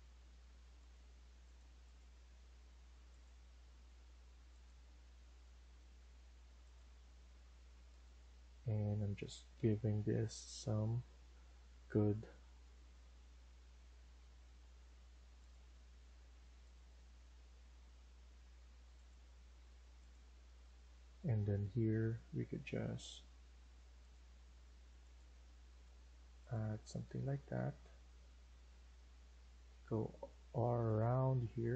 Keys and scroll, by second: 22.4 Escape.